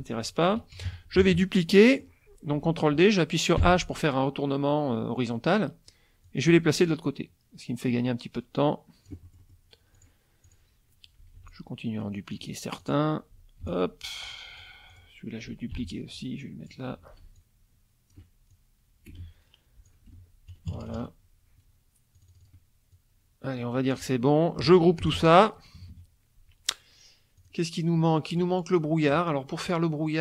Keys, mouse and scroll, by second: 0.7 KP_Subtract, 1.2 ctrl+d, 1.7 ctrl+click, 3.6 h, 6.3-9.7 drag, 10.0 ctrl+click, 10.4 click, 11.4 ctrl+d, 11.5-12.6 ctrl+drag, 12.8 click, 13.6 ctrl+d, 13.7-14.8 ctrl+drag, 14.9 click, 15.7 ctrl+d, 16.1-16.9 ctrl+drag, 17.4 ctrl+shift+click, 18.5-20.1 ctrl+shift+drag, 19.1 space, 20.1 F1, 22.1 click, 22.9-24.2 drag, 25.0 ctrl+g, 25.8 KP_Subtract, 27.4 click, 28.0 middle click.